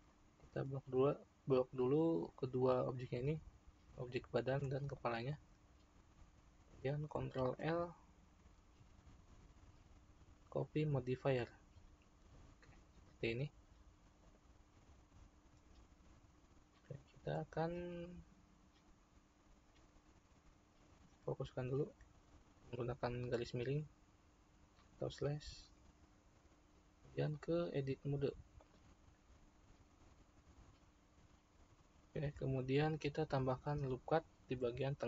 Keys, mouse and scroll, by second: 0.1-3.1 middle drag, 4.9 shift+click, 7.6 ctrl+l, 13.5-14.3 scroll up 1, 14.3 click, 21.0 /, 22.6-25.6 shift+middle drag, 27.5-30.5 drag, 34.4 ctrl+r.